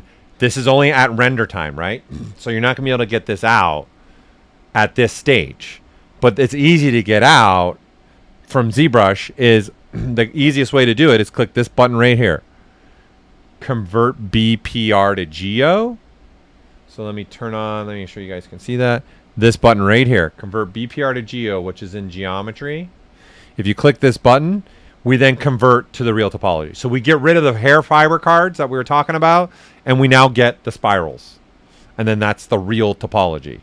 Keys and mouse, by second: 0.1-2.6 right drag, 2.3 typing, 7.1-9.6 drag, 7.1 typing, 9.6 click, 18.6 shift+m, 24.0 click, 31.6 typing.